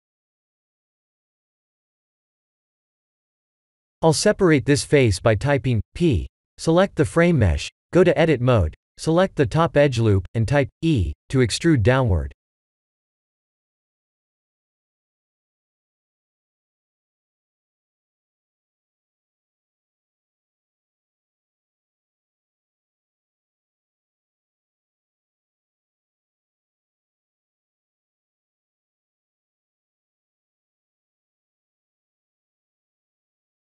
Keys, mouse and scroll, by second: 1.7 Tab, 2.4 Tab, 2.9 click, 3.4 Tab, 5.0 p, 6.0 Tab, 6.6 click, 8.0 Tab, 8.6 Tab, 9.6 Tab, 12.6 2, 12.9 alt+click, 16.4 KP_1, 17.3 shift+z, 17.8 e, 19.6 click, 20.5 Tab, 20.9 middle click, 21.9 shift+z, 23.7 click, 25.1 KP_0.